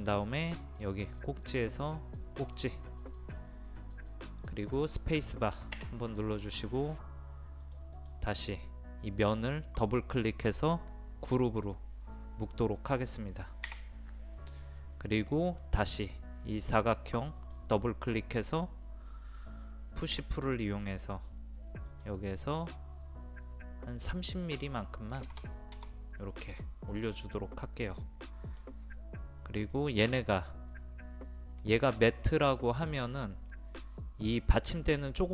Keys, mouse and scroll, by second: 0.2-3.8 drag, 6.8 space, 7.6 click, 13.7 a, 17.1 click, 20.1 p, 21.9 click, 25.2 KP_3, 25.3 KP_0, 27.1-34.7 middle drag.